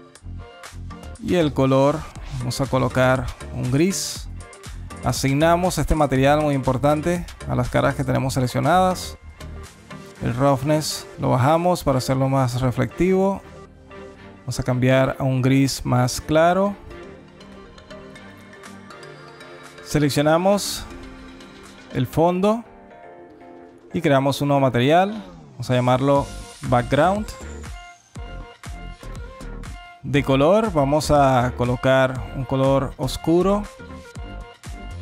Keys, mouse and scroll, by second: 1.3 click, 4.8 click, 9.4 click, 9.7 click, 10.0 click, 10.7 click, 11.0 click, 11.2 click, 13.2 click, 14.3 click, 15.2 click, 21.2 Tab, 21.5 click, 21.8 Tab, 23.3 click, 26.0 click, 30.4 click.